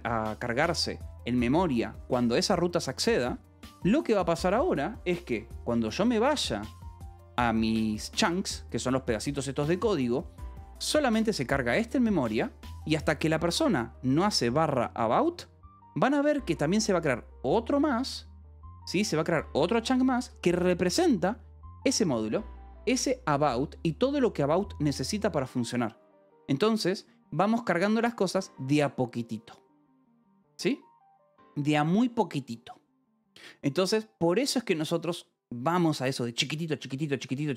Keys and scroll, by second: 5.8 w.